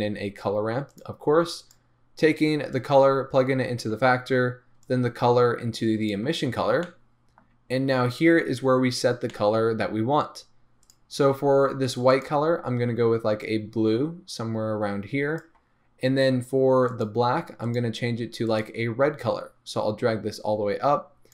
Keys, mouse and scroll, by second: 2.8 click, 6.9-7.8 middle drag, 7.8-9.3 scroll up 1, 11.0 drag, 12.2 click, 17.0 drag, 17.8 drag, 18.6 click.